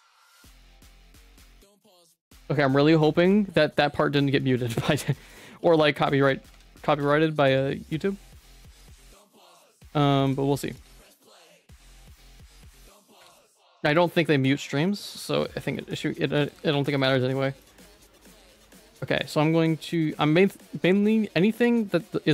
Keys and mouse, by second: 4.2 middle click, 4.6 ctrl+s, 4.8 1, 5.6 3, 5.9 middle click, 6.5 ctrl+s, 6.9 Tab, 7.1 middle click, 7.9 /, 8.5 Tab, 8.7 middle click, 8.9 shift+middle click, 9.3 2, 10.3 alt+click, 11.0 middle click, 12.1 alt+shift+click, 12.6 alt+shift+click, 13.1 ctrl+x, 13.4 middle click, 14.5 ctrl+z, 14.8 middle click, 17.6 alt+shift+click, 18.5 alt+shift+click, 18.8 ctrl+x, 20.0 middle click.